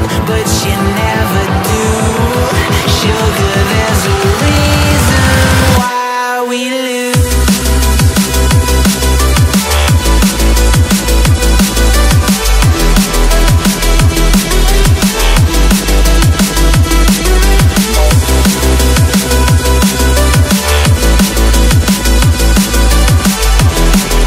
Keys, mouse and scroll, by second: 1.2-1.7 typing, 1.9 Return, 5.9 double click, 9.1-9.7 typing, 9.9 Return, 11.4 double click, 14.0-15.1 typing, 18.5-19.9 typing, 18.6-19.0 scroll down 1, 19.1 scroll up 1, 20.3 shift+click, 21.2 ctrl+g, 22.6 ctrl+z, 24.0 scroll down 1.